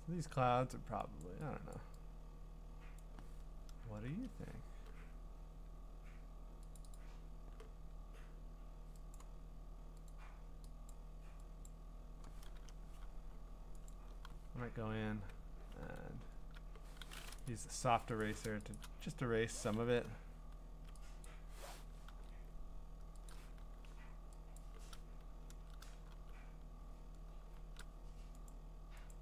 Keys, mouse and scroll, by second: 1.2 click, 1.7 click, 3.0 click, 4.1 Return, 6.8 click, 6.9 click, 9.2 click, 10.1 click, 10.9 click, 11.7 click, 12.4 Return, 13.9 click, 14.1 b, 15.8 e, 17.4 right click, 18.2 click, 18.5 ], 18.7 click, 18.8 click, 20.0-20.9 ], 21.2 click, 22.1 ctrl+z, 23.3 click, 24.6 click, 25.5 ctrl+z, 26.1 b, 28.5-29.2 drag.